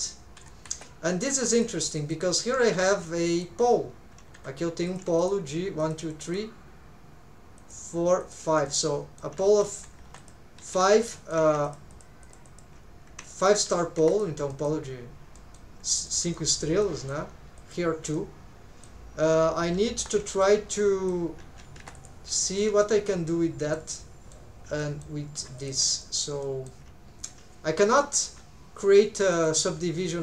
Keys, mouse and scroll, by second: 1.3 1, 1.5 click, 2.0 middle click, 2.7 shift+middle click, 3.1 middle click, 4.3 2, 4.9 click, 5.2 shift+click, 5.8 shift+click, 6.2 shift+click, 7.6 click, 8.2 shift+click, 8.7 middle click, 9.5 alt+a, 9.6 middle click, 10.0 2, 10.2 click, 10.6 alt+z, 11.1 shift+middle click, 11.7 shift+click, 11.9 shift+click, 12.2 shift+click, 12.4 shift+click, 13.3 shift+click, 13.7 alt+a, 14.0 1, 14.1 click, 14.5 middle click, 15.4 middle click, 15.9 shift+middle click, 16.3 middle click, 16.8 middle click, 17.6 click, 18.2 middle click, 20.0 3, 20.3 alt+shift+click, 20.8 middle click, 21.4 alt+a, 21.8 1, 21.9 click, 22.4 shift+middle click, 22.8-23.8 middle drag, 24.0 middle click, 24.8 middle click, 25.6 click, 26.0 middle click, 26.4 shift+middle click.